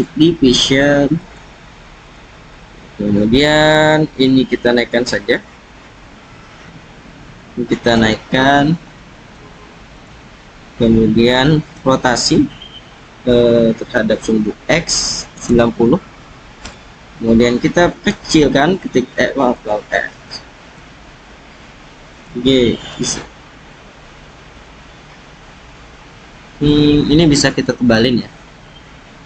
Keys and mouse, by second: 1.3 click, 2.5 click, 6.6 s, 7.9 g, 9.3 z, 9.9 click, 11.7 r, 14.0 x, 15.4 9, 15.5 0, 16.6 Return, 18.2 s, 19.5 click, 20.3 click, 22.2 g, 22.9 z, 25.6-26.6 drag, 27.4 click.